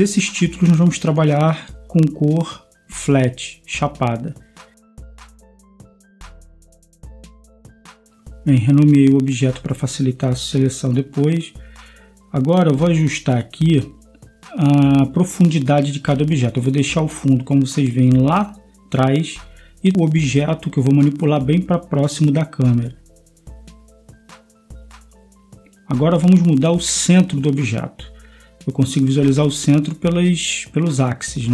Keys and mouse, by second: 5.2 ctrl+s, 8.4-13.5 drag, 14.3-17.4 right drag, 17.5-17.9 middle drag, 18.9 middle click, 21.8-24.5 drag, 25.4 KP_0.